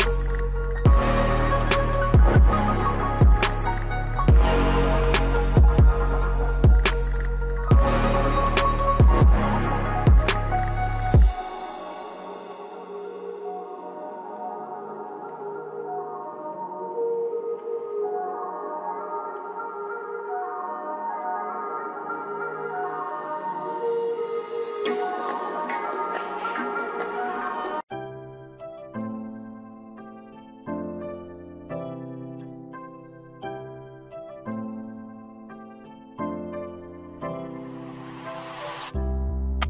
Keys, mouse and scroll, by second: 2.8 shift+Page_Down, 3.0-3.3 scroll down 1, 3.3 click, 5.5 click, 6.2-7.2 typing, 7.0 click, 7.3 scroll up 1, 7.9 click, 9.0 scroll down 1, 9.4 click, 10.5-12.9 typing, 12.7 click, 13.5-16.3 drag, 17.7 shift+click, 19.4-19.8 scroll down 1, 19.8 click, 21.7 Delete, 21.9-24.3 drag, 24.3 F4, 25.5 click, 27.6 typing.